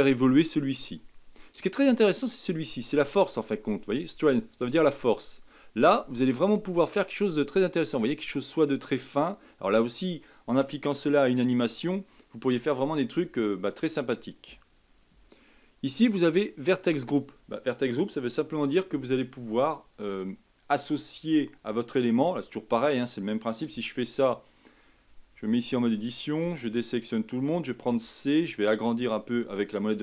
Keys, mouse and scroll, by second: 9.3-12.7 middle drag, 12.7 scroll up 2, 25.2 Tab, 26.4 a.